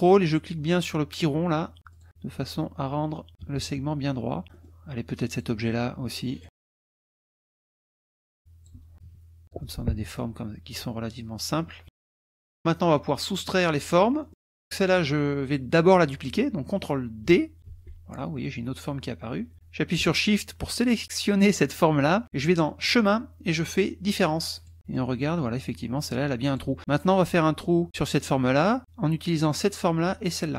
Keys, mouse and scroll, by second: 1.1 ctrl+click, 2.0 ctrl+click, 2.1 ctrl+middle click, 3.4 KP_Subtract, 4.4 middle click, 5.3 click, 6.4 click, 7.0 Delete, 7.1-8.8 drag, 7.6 Delete, 8.9 KP_Subtract, 9.4 middle click, 10.1-12.3 middle drag, 11.9 KP_Subtract, 13.4 click, 14.2 click, 14.9 click, 17.7 ctrl+d, 21.5 shift+click, 22.9 click, 24.7 click, 24.9-26.8 drag, 26.9 click, 29.5 click, 30.4 shift+click.